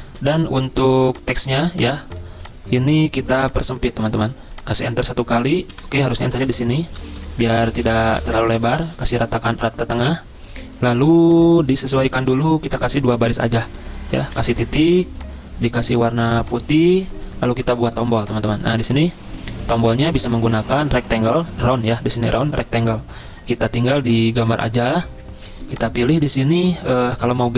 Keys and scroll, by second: 0.1 ctrl+z, 4.9 Return, 5.7 Delete, 6.4 \, 7.1 BackSpace, 7.5 BackSpace, 7.9 BackSpace, 8.2 Return, 8.9 ctrl+e.